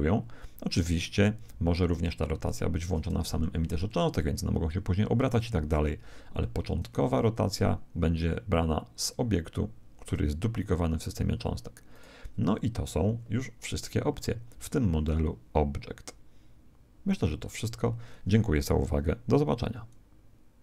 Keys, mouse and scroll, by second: 7.4 r, 11.9 right click.